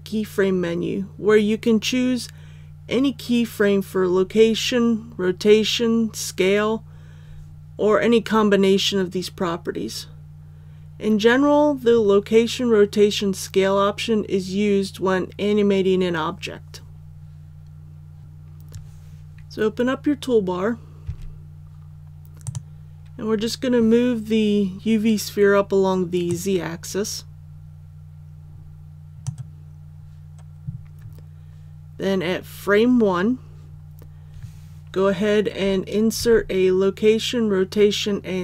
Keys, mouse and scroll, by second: 18.2 click, 21.0 t, 22.4-29.9 drag, 36.1 i.